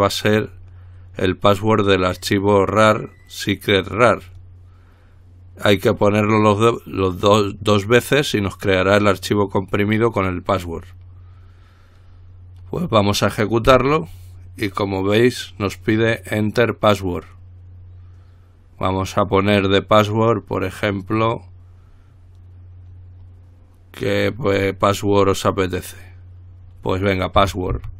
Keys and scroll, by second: 14.0 Return, 27.7-27.9 typing.